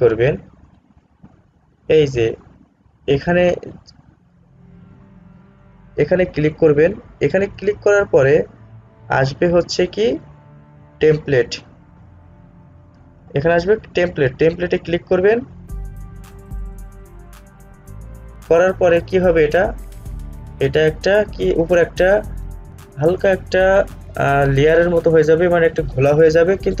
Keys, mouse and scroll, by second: 15.0 click.